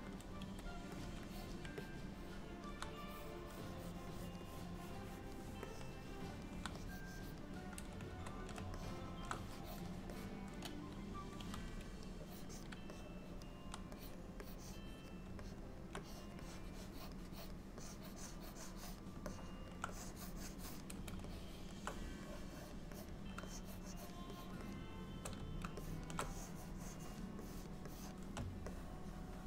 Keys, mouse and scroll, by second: 0.5 f, 1.4 click, 1.9 middle click, 3.0 click, 4.2 click, 4.6 click, 5.7 middle click, 6.8 click, 8.2 ctrl+z, 8.8 ctrl+middle click, 9.7 click, 10.2 click, 11.4 f, 12.3 click, 12.6 click, 13.0 middle click, 14.1 click, 14.5 click, 15.5 middle click, 16.1 click, 16.5 click, 17.4 click, 17.9 click, 19.3 middle click, 20.0 click, 21.4 shift+middle click, 22.3 click, 23.0 click, 23.5 shift+click, 24.3 shift+click, 24.4 click, 25.2 click, 25.8 shift+middle click, 26.3 click, 27.5 click, 27.9 click, 28.7 middle click.